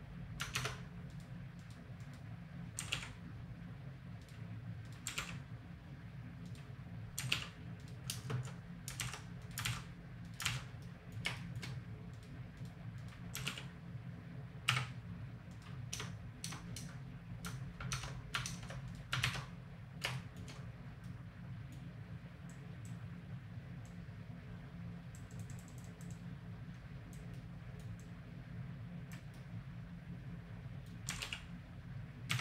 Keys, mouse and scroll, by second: 0.5 ctrl+Tab, 1.1 click, 2.8 r, 4.9 click, 5.1 r, 6.6 click, 7.2 r, 8.1 space, 9.0 alt+r, 9.6 alt+r, 10.4 alt+r, 11.4-13.0 right drag, 13.0 click, 13.3 r, 15.9 Tab, 16.4 Tab, 17.9 ctrl+Tab, 18.5 ctrl+Tab, 19.2 ctrl+Tab, 19.8 click, 22.6-27.8 drag, 27.3 middle click, 28.0-29.8 drag, 29.8-31.1 middle drag, 31.1 r.